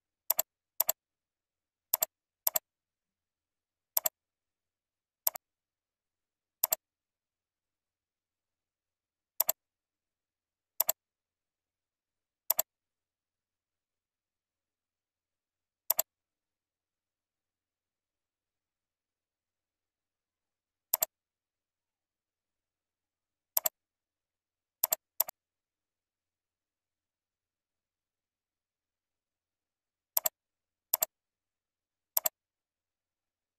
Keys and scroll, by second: 1.8 ctrl+c, 4.8 ctrl+v, 19.9 ctrl+z, 24.2 ctrl+c, 27.0 ctrl+v.